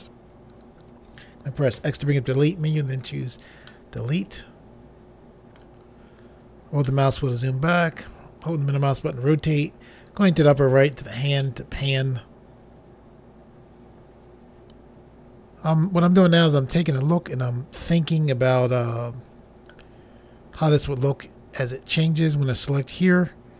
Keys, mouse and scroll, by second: 0.5 shift+click, 1.7 x, 2.9 click, 3.7 middle click, 5.9-6.8 scroll down 2, 6.9 middle click, 10.1 click, 11.4 middle click, 22.0 click.